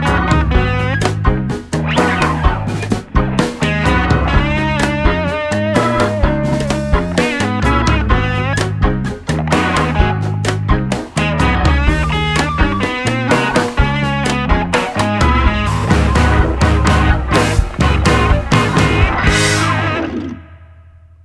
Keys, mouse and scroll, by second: 0.1 click, 2.2-5.4 drag, 4.5-6.0 middle drag, 5.2 right click, 5.8-10.7 drag, 8.1-9.7 middle drag, 11.1-12.8 middle drag, 11.7 click, 13.5 click, 14.1 KP_0, 15.4 s, 16.9 click, 19.6 s.